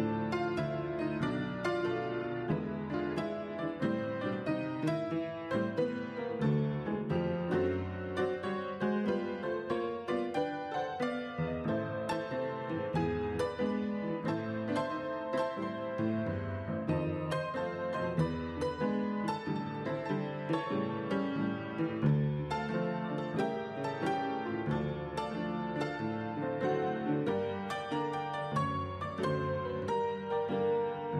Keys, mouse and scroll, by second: 6.4 right click, 7.6 double click, 11.8-12.7 typing, 13.0 Return, 20.6 right click.